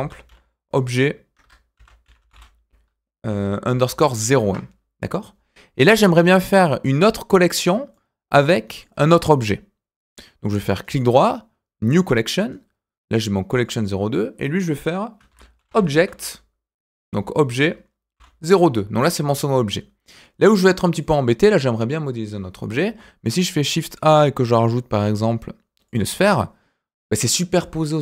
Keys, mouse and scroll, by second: 5.9 click, 7.7 scroll down 1, 7.9-8.8 middle drag, 10.4 click, 10.8 right click, 13.6 click, 13.7-19.2 drag, 21.0 click, 22.8 shift+a.